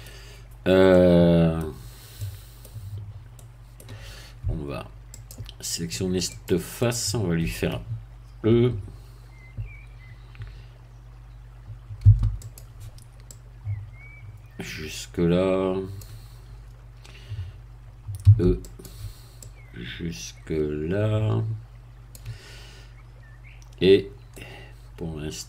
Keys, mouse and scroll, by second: 0.9-2.0 middle drag, 2.1-3.1 middle drag, 3.3 middle click, 5.1 click, 6.3 click, 6.8 middle click, 12.0 e, 12.4 click, 13.3-16.1 drag, 18.3 e, 18.7 click, 19.4-22.3 drag, 24.3-25.4 middle drag.